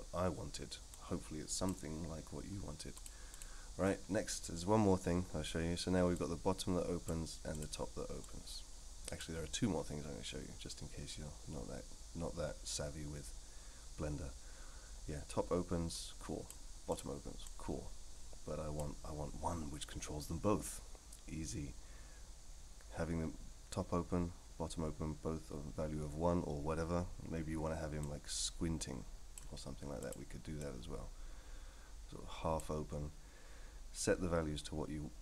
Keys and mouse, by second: 1.0 click, 2.9-3.4 drag, 6.3 click, 7.5 click, 8.3 click, 15.9 click, 16.9 click, 17.5-18.8 drag, 28.0-29.4 drag, 30.0 click, 30.6-32.6 drag.